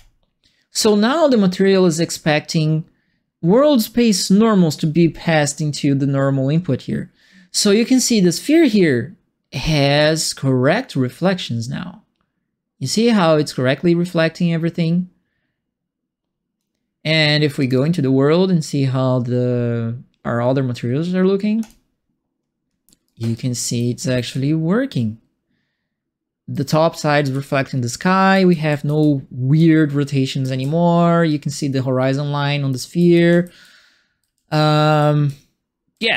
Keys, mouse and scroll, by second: 7.6-16.5 drag, 17.5 click, 23.0-26.5 right drag, 23.0-24.8 typing, 27.0-29.5 typing, 27.2-36.1 right drag, 30.6-36.1 typing.